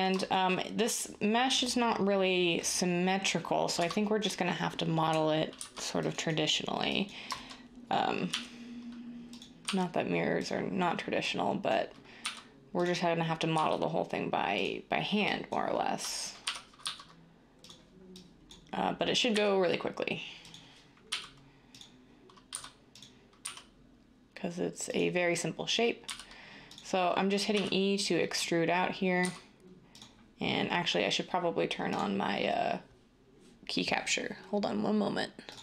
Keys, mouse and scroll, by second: 35.5 d.